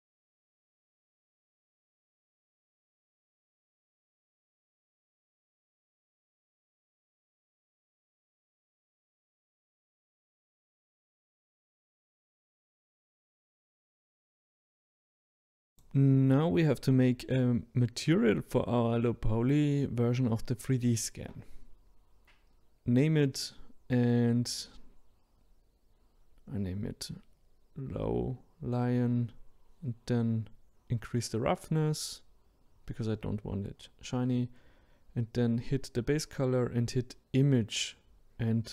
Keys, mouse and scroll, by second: 0.1 click, 0.2 middle click, 0.8 scroll down 2, 1.0 click, 1.6 middle click, 2.5 click, 2.9 scroll down 1, 3.0 scroll up 1, 4.8 Delete, 5.0 click, 5.5 middle click, 6.8 middle click, 7.0 click, 7.1 middle click, 7.2 Tab, 7.3 middle click, 7.5 scroll up 2, 7.8 click, 8.2 middle click, 8.7 click, 9.0 middle click, 9.6 click, 10.3 middle click, 10.4 click, 10.5 click, 10.9 scroll down 2, 11.0 middle click, 11.5 click, 11.6 middle click, 11.8 click, 11.8 middle click, 12.6 ctrl+z, 13.0 middle click, 13.1 click, 13.3-15.7 middle drag, 15.7 click, 17.2-21.5 drag, 29.0-29.7 scroll down 1, 29.7-30.3 scroll down 4, 30.3-37.7 drag, 37.7-38.7 middle drag.